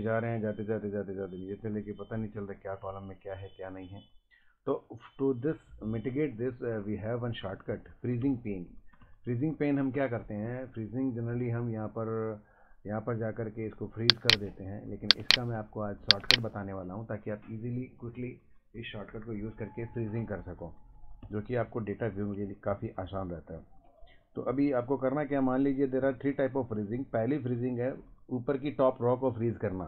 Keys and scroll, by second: 1.7 Up, 2.4 Right, 2.8 Up, 4.4 ctrl+Up, 4.8 Down, 6.5 Down, 6.6 Left, 6.8 Up, 7.4 Down, 7.5 Left, 8.1 Right, 8.2 Down, 8.3 Left, 8.5 Up, 8.9 Right, 9.0 Down, 9.1 Left, 9.5 Up, 9.8 Right, 9.9 Down, 10.1 Left, 10.2 Up, 10.5 Right, 10.5 Down, 10.6 Right, 10.7 Down, 21.2 Right, 21.6 Down, 21.9 Left, 22.0 Up, 22.7 Down, 22.8 Left, 24.1 Up, 25.2 Left, 25.3 Up, 26.0 Down, 26.1 Right, 26.4 Up, 26.8 Down.